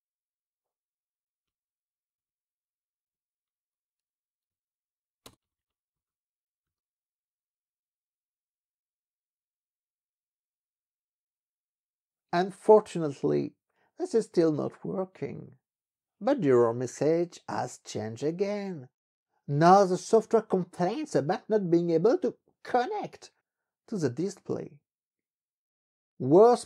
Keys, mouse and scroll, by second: 1.2 ctrl+b, 1.5 Up, 2.2 Up, 3.0 Left, 3.5 BackSpace, 4.5 i, 5.3 Return, 5.5 ctrl+b, 6.0 Down, 6.7 Up, 7.8 Up, 11.6 Return.